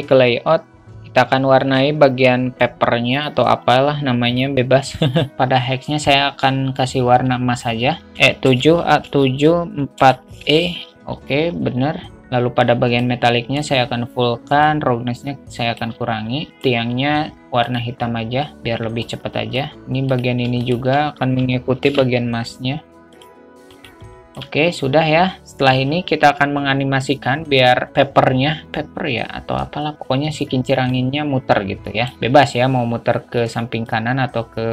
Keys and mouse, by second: 3.4-4.0 drag, 13.3 click, 15.0-16.1 drag, 16.8 click, 21.0 shift+click, 22.2 ctrl+l, 24.0-24.4 drag, 24.4 shift+a, 24.5 shift+middle drag, 24.5 shift+a, 31.2 click, 32.2 ctrl+z, 34.3 click.